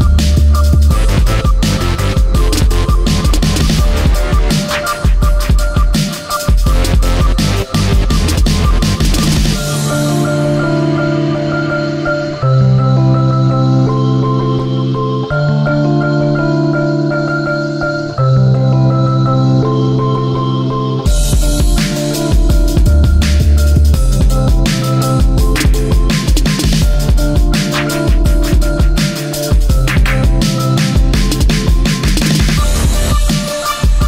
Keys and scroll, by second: 5.1 ctrl+z, 14.4 ctrl+c, 20.7 ctrl+v.